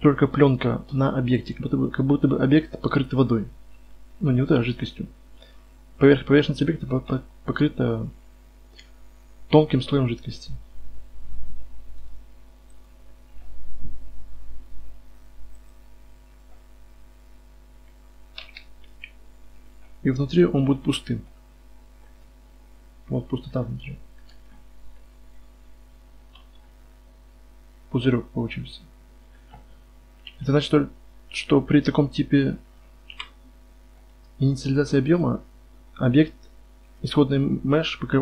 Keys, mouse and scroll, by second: 1.9-12.0 middle drag, 12.0-13.9 right drag, 12.9-14.9 drag, 15.7-18.4 drag, 16.1 middle drag, 16.1 right drag, 18.4 z, 18.8 KP_Divide, 19.2 z, 20.4 KP_5, 24.0 middle click, 24.2 middle drag, 24.5 middle click, 25.8 middle click, 26.3 z, 27.3-27.7 middle drag, 30.2 KP_5, 30.6 KP_1, 33.1 KP_Divide, 33.9-38.2 right drag.